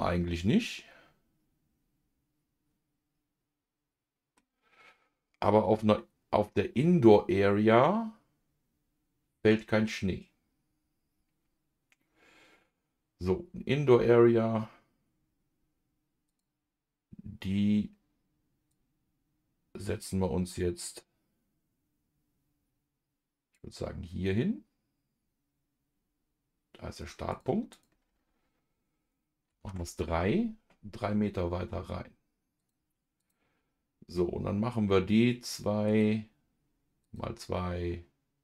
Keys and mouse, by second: 16.2 click, 18.7-23.5 drag, 27.3-32.6 drag, 33.2 click, 35.9 click, 37.0 click.